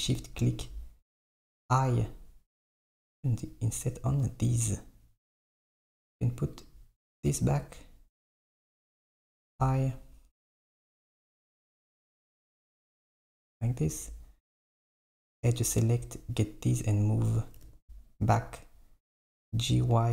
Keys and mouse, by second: 0.0 shift+click, 1.5 i, 6.6 click, 8.3 z, 9.5 i, 15.5-16.9 drag, 17.6 g.